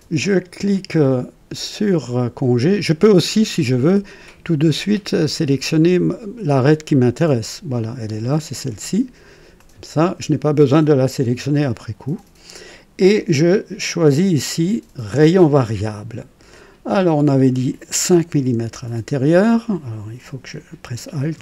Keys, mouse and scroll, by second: 3.7 click, 7.4 click, 9.5 click, 14.4 click, 15.4 click, 16.9 click, 18.4 KP_5, 21.3 KP_5.